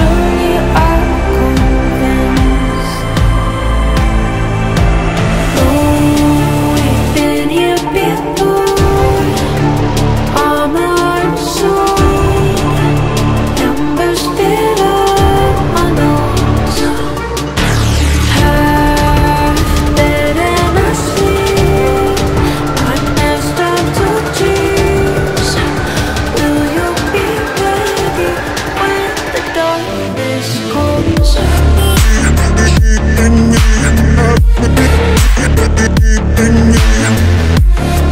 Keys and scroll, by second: 9.5 Delete, 18.3 Delete, 19.9 F3, 27.6 shift+F2, 27.7 F3, 31.7 c, 37.5 ctrl+z.